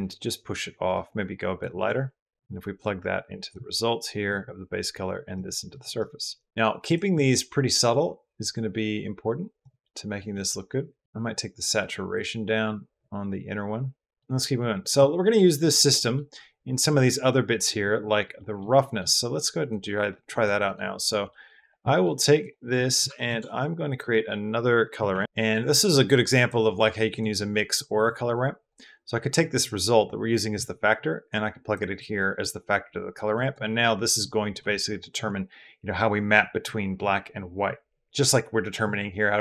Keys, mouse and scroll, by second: 2.3 click, 4.1-5.2 drag, 5.5 click, 5.6 click, 6.3 click, 6.4 click, 6.6 click, 9.6-10.0 middle drag, 10.1-10.8 middle drag, 11.0 middle click, 14.9 middle click, 15.9 middle click, 18.3 middle click, 18.7 middle click, 19.2 click, 20.1 click, 20.1 click, 20.8 click, 21.2 middle click, 21.4 middle click, 21.8 middle click, 22.2 middle click, 22.7 middle click, 23.1 shift+a, 26.9 drag, 27.5 click, 28.4 drag, 29.2-31.5 drag, 32.0 click, 33.1 click.